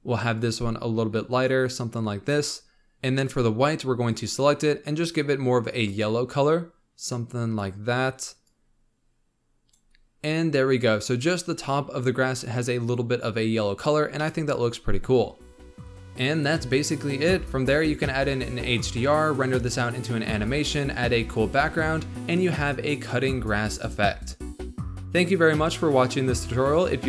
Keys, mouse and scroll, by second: 2.9-4.2 drag, 8.4-11.4 drag, 11.4-13.5 scroll up 1, 13.5-14.1 scroll down 3, 14.1-16.0 middle drag, 15.9 scroll down 3, 16.0 scroll up 2, 16.2 middle click, 16.4 click, 16.7 click, 17.0-17.6 typing, 17.8 click, 18.0 click, 19.3 middle drag, 19.5 scroll up 2, 19.7 click, 19.9 drag, 19.9 scroll down 1, 20.0 click, 20.7 click, 20.8 middle click, 21.1 click, 21.7 shift+middle drag, 22.0 ctrl+alt+KP_0, 22.2 click, 22.3 g, 22.6 scroll up 2, 22.7 g, 22.9 g, 23.4 g, 24.1 scroll down 1, 24.3 scroll up 1, 24.4 click, 24.8 click, 25.0-25.4 drag, 25.4-26.0 scroll down 7, 26.0 scroll up 1, 26.2 ctrl+s, 26.6 click.